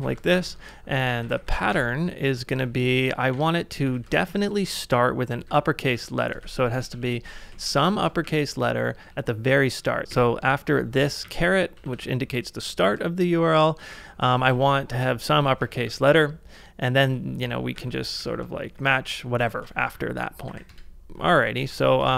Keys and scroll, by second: 0.0-4.0 typing, 5.5 ], 6.4 a, 7.5 shift+z, 8.3 Right, 9.1-9.8 Left, 9.8-12.4 typing, 11.0 ctrl+c, 13.7-16.1 typing, 17.8-18.7 typing, 19.6 ctrl+c, 19.8 shift+;, 20.5 w, 20.7 Return, 21.7-22.1 typing.